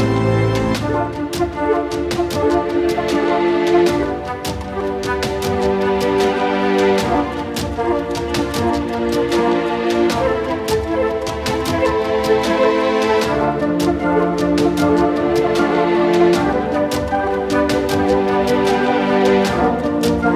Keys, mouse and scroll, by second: 2.2 middle click, 2.7-3.6 drag, 3.6 s, 4.3 alt+click, 4.5 g, 4.8-6.1 alt+drag, 6.5-6.8 alt+drag, 6.8 alt+middle click, 7.3-8.3 drag, 8.3 middle click, 8.4 ctrl+alt+s, 8.8-9.1 scroll down 1, 9.1-9.4 scroll up 8, 9.4-11.0 shift+drag, 11.0-12.8 middle drag, 12.8 scroll down 4, 12.8 ctrl+alt+s, 13.2 ctrl+alt+s, 13.5 middle click, 13.8 click, 14.7 middle click, 15.2 n, 15.6-18.8 drag.